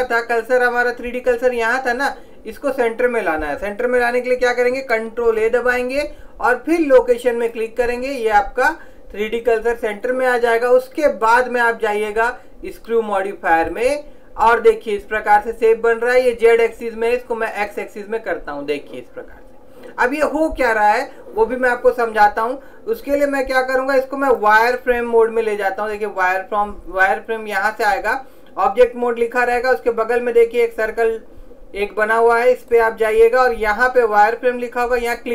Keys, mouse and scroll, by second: 5.4 ctrl+a, 11.4 click, 16.8 click, 24.4 click, 32.8 click.